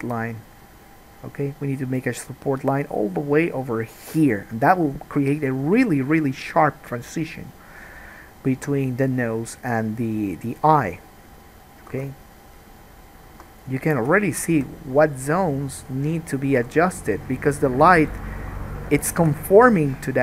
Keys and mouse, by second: 8.8 1, 9.1-13.7 middle drag, 9.1-13.7 right drag, 12.1 ctrl+z, 13.5 2, 14.8 g, 16.7 alt+a.